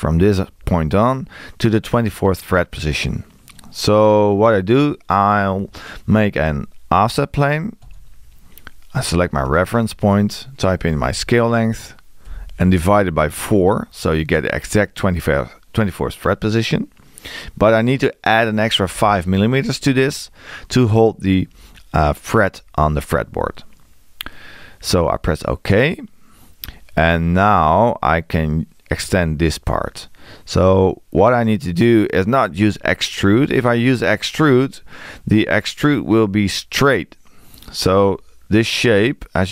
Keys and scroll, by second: 10.8 6, 19.0 space, 35.9 e.